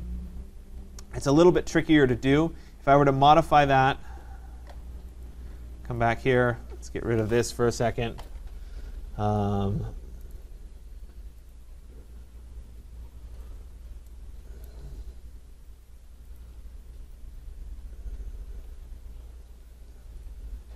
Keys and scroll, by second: 7.2 Delete.